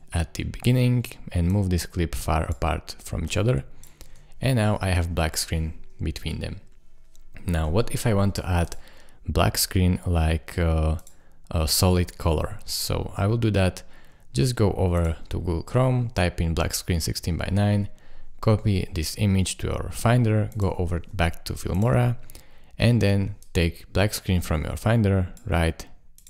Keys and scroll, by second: 4.1 space, 7.7 space, 14.1 super+Tab, 19.5 super+Tab, 21.0 super+Tab.